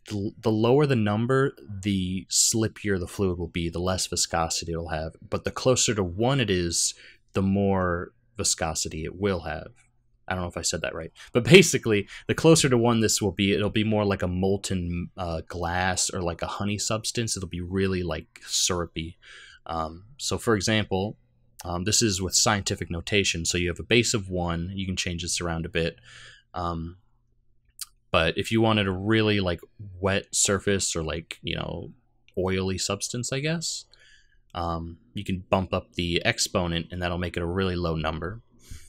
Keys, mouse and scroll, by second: 35.2 click.